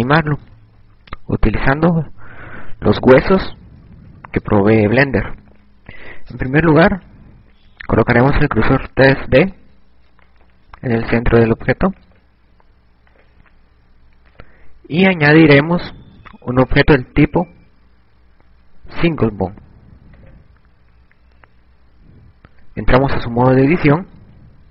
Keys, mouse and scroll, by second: 0.6-5.5 typing, 9.1 click, 12.7 click.